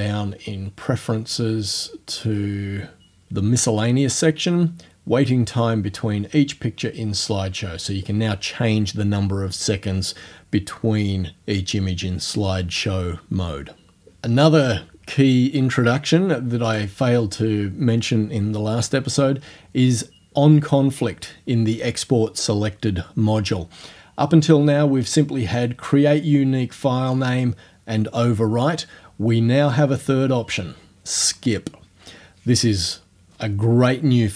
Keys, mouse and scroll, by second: 1.0-1.4 scroll down 2, 2.3-2.6 scroll down 2, 16.7 click, 26.8 scroll down 2, 29.3 scroll down 2.